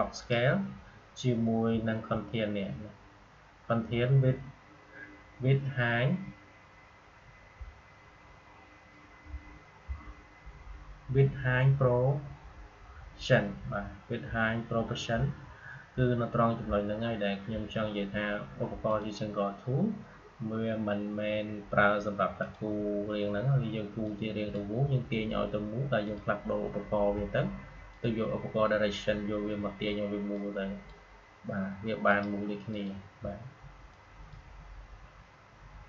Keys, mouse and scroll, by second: 0.1 click, 18.8 click, 22.3-25.9 drag, 30.2-35.8 drag.